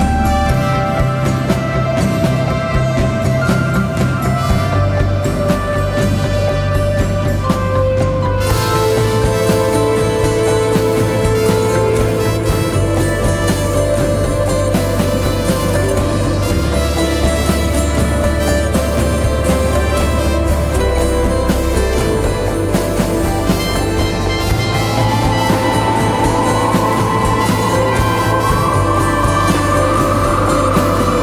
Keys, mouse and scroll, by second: 2.7 ], 2.8 ], 2.9 ], 6.9 double click, 8.5 double click, 18.4 right click, 20.5 double click.